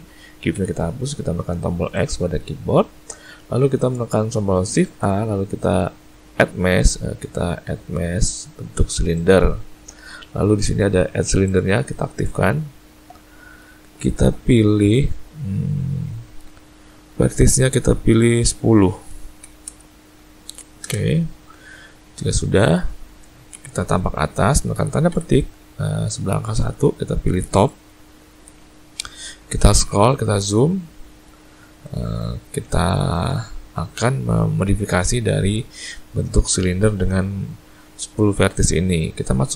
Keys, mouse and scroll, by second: 0.5 x, 4.8 shift+a, 11.5 click, 18.2 click, 29.4-30.2 scroll up 4, 30.6-31.6 scroll up 4, 31.8 shift+middle click.